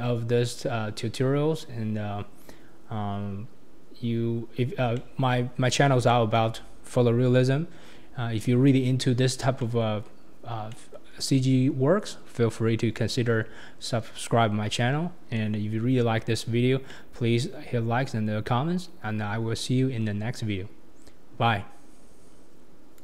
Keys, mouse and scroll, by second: 4.4-4.9 scroll down 2, 4.9 shift+middle click, 5.5 scroll up 5, 6.1-7.4 shift+middle drag, 7.4-9.6 scroll down 3, 9.6-10.3 middle drag, 10.3-10.7 scroll up 1, 10.7-15.2 middle drag, 15.2 scroll down 1, 15.3-16.6 middle drag, 16.6-16.9 scroll down 1, 16.9-18.5 middle drag, 18.5-21.6 scroll up 2.